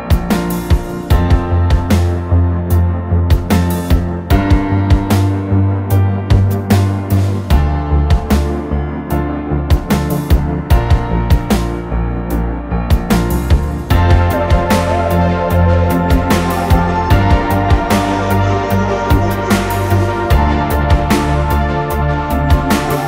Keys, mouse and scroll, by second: 2.5 double click, 7.9 ctrl+t, 11.0 typing, 11.6 Return.